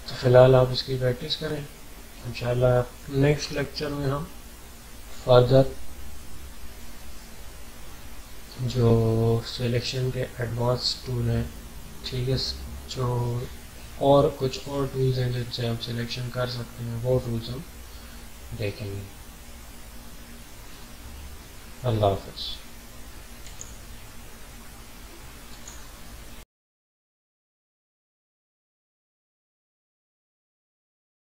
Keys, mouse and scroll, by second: 23.4 click, 23.4 typing.